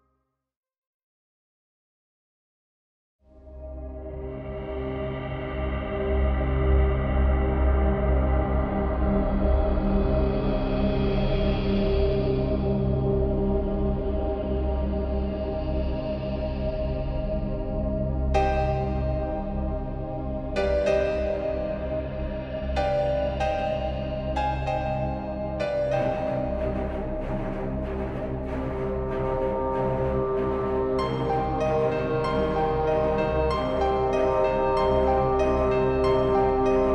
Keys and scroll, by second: 4.4-6.2 typing, 9.2 ctrl+v, 12.9 space, 16.6 ctrl+t, 22.2 ctrl+t, 24.0 t, 32.9 space.